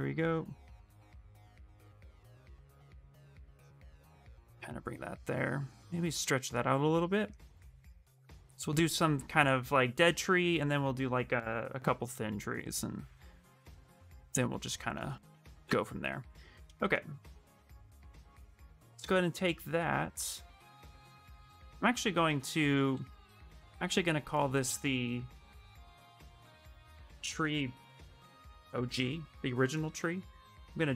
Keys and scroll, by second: 17.3 shift+f, 17.7 a, 22.0 a, 25.1-27.1 typing, 28.3-29.2 typing.